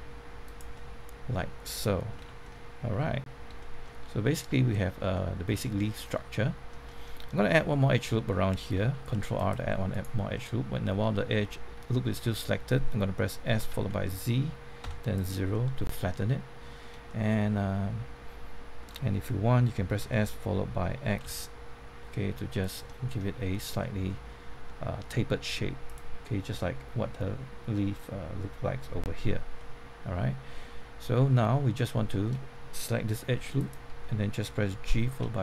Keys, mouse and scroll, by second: 0.4 click, 0.7-3.4 middle drag, 2.1 Tab, 3.5-5.5 shift+middle drag, 5.6 shift+middle click, 7.4 Tab, 8.9 ctrl+r, 9.3 click, 9.9 right click, 10.3 middle click, 11.1 scroll up 1, 11.5 middle click, 13.2-15.3 typing, 15.1 click, 15.5-19.1 middle drag, 20.0 s, 22.6 click, 22.8 middle click, 25.9 click, 29.5-33.1 middle drag, 33.5 alt+click, 34.8 alt+g, 35.1 alt+y.